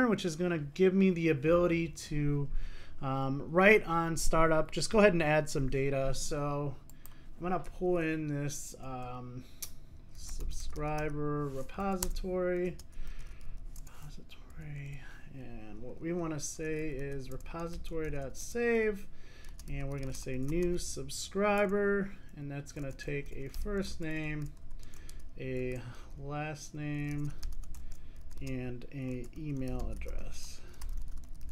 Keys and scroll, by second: 12.1 Return, 12.9 Return.